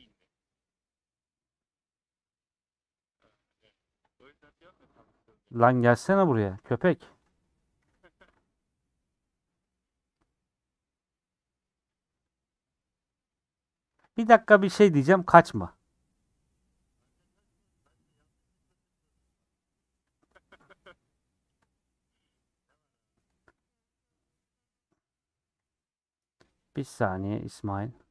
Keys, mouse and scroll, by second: 5.6-6.7 middle drag, 6.7 scroll up 1, 7.3 click, 8.8 /, 9.3-20.7 middle drag, 20.7 click, 21.7 click, 21.9-23.3 middle drag, 23.3 Tab, 23.7-25.6 middle drag.